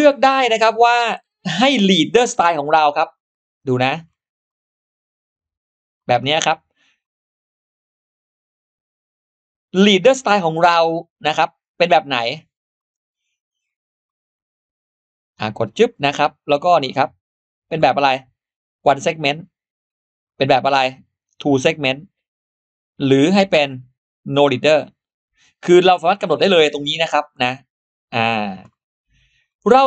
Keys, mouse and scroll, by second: 3.0 click, 3.1 click, 3.5 scroll down 2, 4.3-5.8 drag, 7.4-8.9 drag, 11.2 click, 12.6 click, 12.9 click, 13.5 click, 13.9 click, 17.6 click, 18.7 click, 20.1 click, 21.1 click, 22.9 click, 24.5 click, 26.6 click, 27.4 click, 28.2 click, 28.6-28.9 scroll down 2, 29.2 scroll up 2.